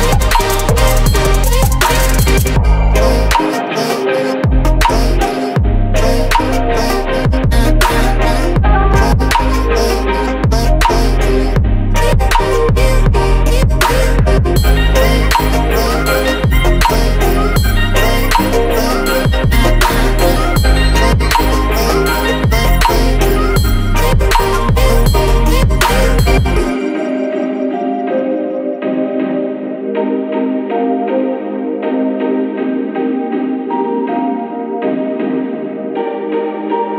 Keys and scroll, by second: 8.9 Return, 13.0 ctrl+z, 22.5 ctrl+], 29.2 Down, 30.1 ctrl+], 32.5 Up.